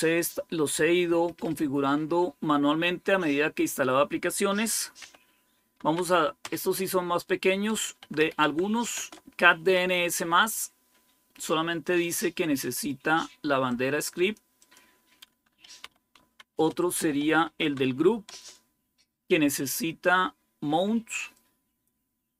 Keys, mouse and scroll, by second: 0.0-2.7 drag, 4.9-6.3 typing, 7.4-8.8 typing, 14.2 click, 15.5-18.2 typing, 21.2 click.